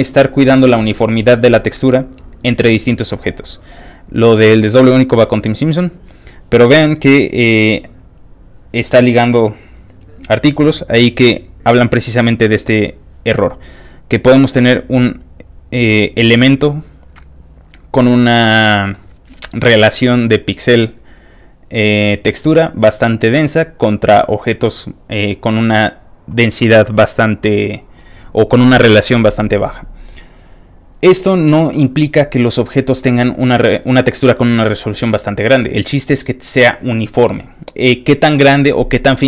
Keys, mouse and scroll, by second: 0.3 click, 2.7 click, 3.9 click, 4.6 click, 5.5 click, 6.2 click, 6.8 click, 7.9 click, 9.0 click, 9.6 click, 10.6 click, 11.2 click, 12.5 click, 14.4 click, 14.5 click.